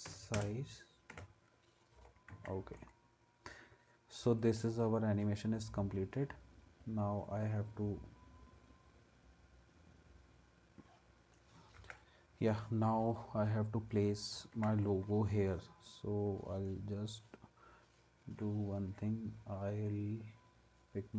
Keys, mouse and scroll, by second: 2.3 ctrl+s, 11.8 ctrl+s, 14.6 ctrl+s.